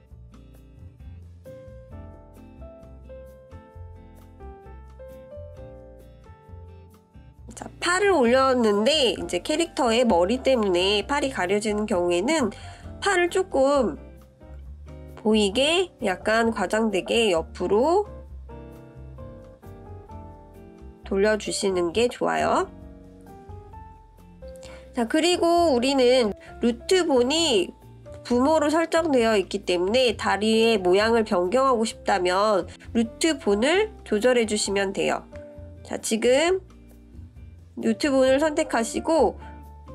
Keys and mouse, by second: 3.5 click, 4.3 click, 6.2 click, 7.5-8.6 drag, 10.0-12.1 drag, 13.5-14.5 middle drag, 15.9-17.8 drag, 18.1-18.6 middle drag, 19.3-20.0 middle drag, 24.9 click, 26.3 click, 27.0-29.0 drag, 29.7-30.0 shift+middle drag, 30.7 shift+drag, 30.8 shift+middle click, 31.4 click, 31.9 click, 32.5-33.5 drag, 36.6 click, 37.5-38.8 drag, 39.7 click.